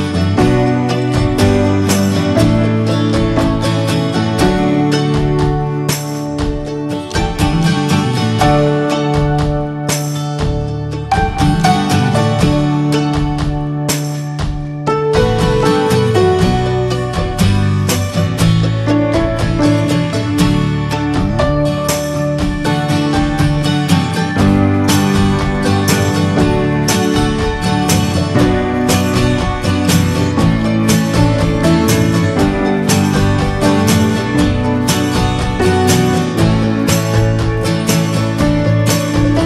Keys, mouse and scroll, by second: 0.0 scroll up 1, 0.9-2.1 scroll down 2, 2.1 click, 2.7 alt+z, 3.1-4.3 drag, 4.8 alt+z, 6.0 click, 6.9 middle click, 7.3 alt+z, 7.6 shift+middle click, 7.8 scroll up 2, 8.2 shift+middle click, 9.1 x, 10.0-10.4 middle drag, 10.4 scroll down 1, 10.8 click, 11.0 middle drag, 11.2 scroll up 2, 11.4 Tab, 11.8 shift+middle click, 12.1 click, 12.4-13.9 middle drag, 13.9 shift+click, 14.1 shift+middle click, 14.3 scroll up 2, 14.7 middle click, 14.9-15.3 scroll up 2, 15.1 shift+middle click, 15.4-17.3 middle drag, 17.3 x, 17.5 middle click, 18.0 click, 18.5 middle click, 19.0 shift+click, 19.3 shift+click, 19.6 middle click, 20.4 shift+click, 20.7 middle click, 20.9-21.2 scroll up 1, 21.2 shift+middle click, 21.8-22.5 scroll up 1, 22.5 ctrl+b, 27.8 click, 28.7 middle click, 29.3 click, 29.6 middle click, 30.0 ctrl+z, 30.3 shift+middle click, 30.7 ctrl+z, 33.2 Tab, 33.3 drag, 33.5 scroll down 1, 33.7-34.2 middle drag, 34.2 scroll down 2, 34.4-35.1 middle drag, 35.1 click, 35.4-35.7 right drag, 35.7 middle click, 35.9 Tab, 36.3 middle click, 36.6-38.6 scroll up 3, 36.8 shift+middle click, 37.2 middle click, 38.6 click.